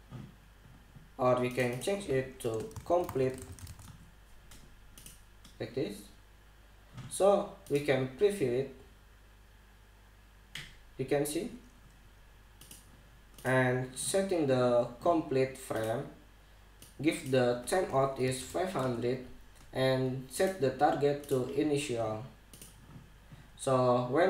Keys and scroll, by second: 3.2-4.7 typing, 18.9 5, 19.5 Return.